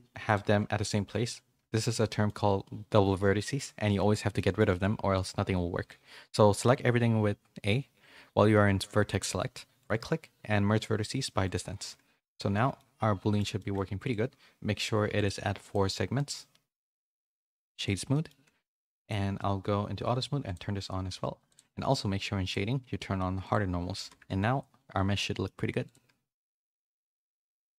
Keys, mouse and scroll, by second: 0.3-1.6 drag, 1.7 shift+middle click, 2.0 middle click, 2.9 g, 3.8 a, 4.3 middle click, 4.7 1, 12.4 a, 12.6 a, 12.7 middle click, 14.0 click, 16.1 click, 17.3 right click, 18.1 middle click, 18.9 click, 20.4 click, 21.4 click, 22.4 click, 23.4 click, 24.2 a, 24.3-25.4 middle drag, 26.8 /, 27.5 a, 27.7 a.